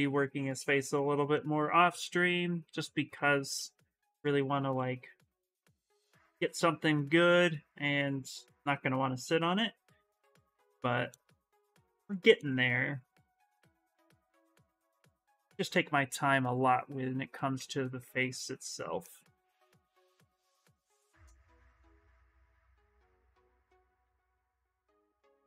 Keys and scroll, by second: 4.0 s, 15.6 space.